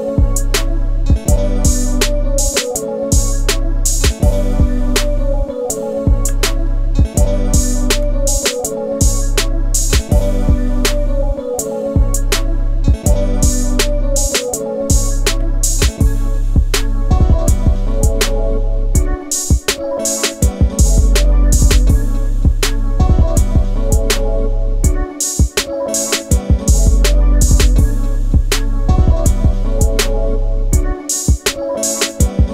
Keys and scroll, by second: 6.0 ctrl+t.